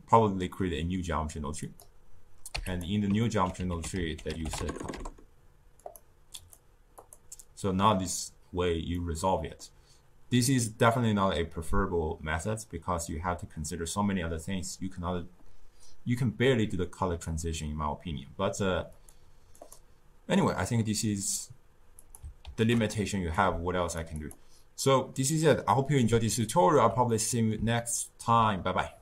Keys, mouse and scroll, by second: 1.5 click, 2.4 q, 3.1 ctrl+middle click, 3.6 ctrl+a, 6.3-8.9 drag, 8.9-11.9 middle drag, 18.9 click, 19.5 click, 21.9 click, 22.4 ctrl+x, 23.3 click, 24.1 click, 26.4-29.0 ctrl+middle drag.